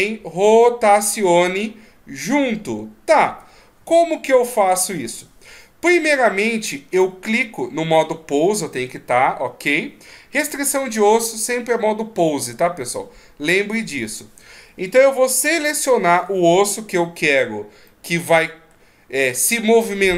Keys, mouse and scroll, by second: 0.0 r, 17.9 middle click.